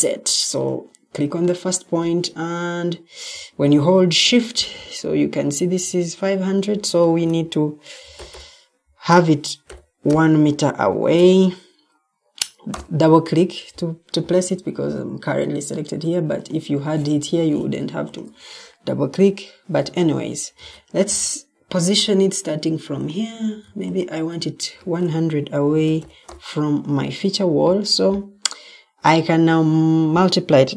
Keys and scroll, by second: 6.9 shift+Tab, 7.7-10.0 typing, 11.0 Return, 20.5 ctrl+d, 23.5 ctrl+d, 24.7 shift+Tab, 25.3-26.4 typing.